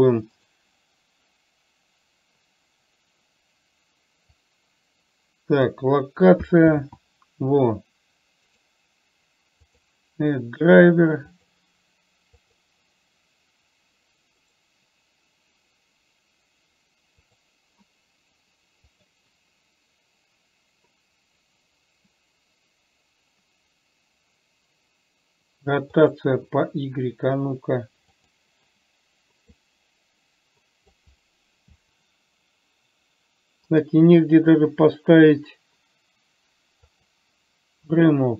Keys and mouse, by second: 1.5-4.9 right drag, 4.9-6.0 drag, 7.2 ctrl+z, 10.0-28.5 right drag, 28.5 click, 30.0-31.4 drag.